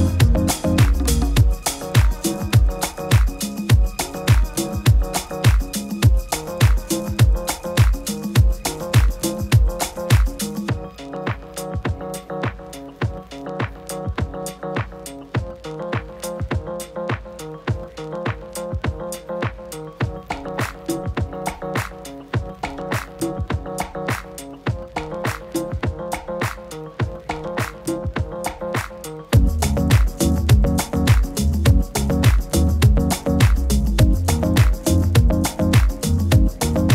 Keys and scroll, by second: 13.9 super+-, 14.1 super+-, 14.5 super+-, 15.6 super++, 16.1 super++, 16.2 super++, 17.8 super++, 17.9 super++, 18.1 super++.